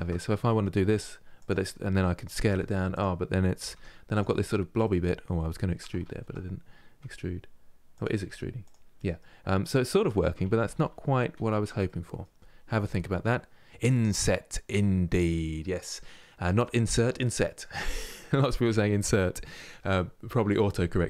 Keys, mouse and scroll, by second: 0.0 middle click, 0.6 e, 4.5-5.7 middle drag, 5.7 ctrl+z, 6.7 e, 7.9 e, 8.6-10.1 middle drag, 10.1 ctrl+z, 10.4 ctrl+z, 11.5-16.8 middle drag.